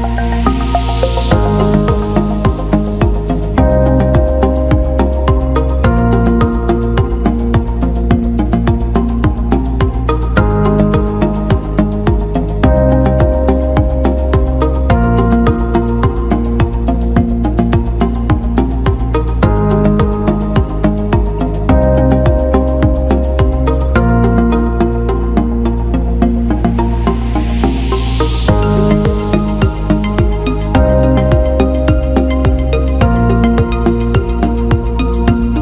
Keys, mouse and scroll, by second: 0.5 click, 1.7-2.8 drag, 3.2 ctrl+alt+middle click, 3.6 ctrl+alt+click, 4.0 ctrl+alt+click, 5.4-6.7 ctrl+alt+drag, 8.5 Tab, 12.7-16.8 drag, 17.5 click, 19.3 click, 21.5 click, 22.4-28.1 drag, 33.3-35.6 drag.